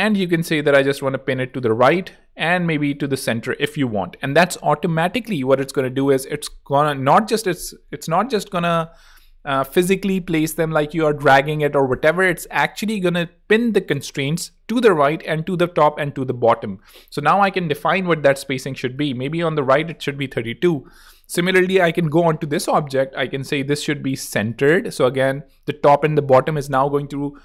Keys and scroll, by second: 19.6 3, 19.7 Return.